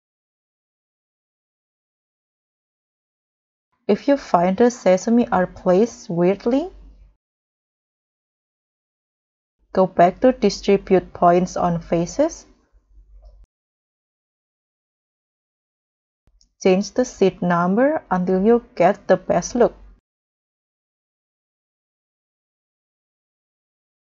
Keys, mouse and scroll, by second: 2.1-2.4 scroll up 6, 2.4-3.1 scroll down 10, 3.3-4.2 scroll up 7, 4.2 scroll down 2, 4.3 middle click, 5.1 scroll up 1, 5.4 middle click, 6.4 middle click, 6.7-7.1 scroll down 6, 7.1 middle click, 7.6 0, 8.3-8.9 scroll up 7, 8.9 scroll down 2, 9.2 scroll up 1, 9.5-9.9 scroll down 1, 10.3-12.1 scroll down 10, 13.0 middle click, 13.0-13.6 scroll up 5, 13.7 scroll down 2, 13.9 middle click, 13.9-14.7 scroll up 4, 14.7-15.2 middle drag, 15.2 scroll down 4, 15.5 scroll up 1, 20.2 middle click, 20.5 scroll down 4, 20.6 middle click, 21.2 0, 21.8 scroll down 2, 22.1-23.1 scroll up 3, 23.1-23.9 scroll up 11.